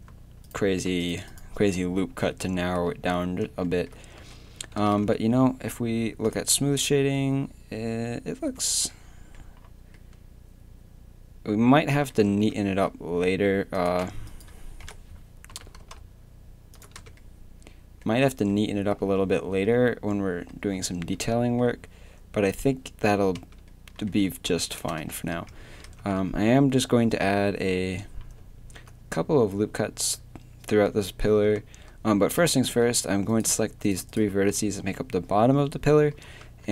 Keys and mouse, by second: 0.1 a, 2.9 z, 3.6 click, 4.2 z, 4.5 a, 4.8 Tab, 5.0 z, 12.3 Tab, 13.8-14.8 right drag, 14.8 KP_3, 15.5 g, 17.0 Tab, 18.3 Tab, 19.0 Tab, 22.6-25.0 drag, 23.4 Tab, 24.2 a, 25.0 KP_3, 25.3 Tab, 25.9 Tab, 26.3 a, 26.8 a, 32.4 z, 34.5 z.